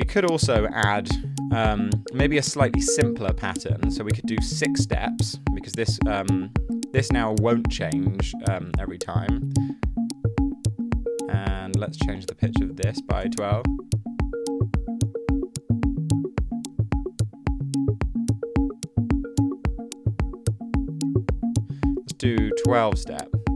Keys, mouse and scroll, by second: 4.5 6, 4.6 Return, 12.8-13.6 typing, 19.5 super+z, 22.2-23.5 typing.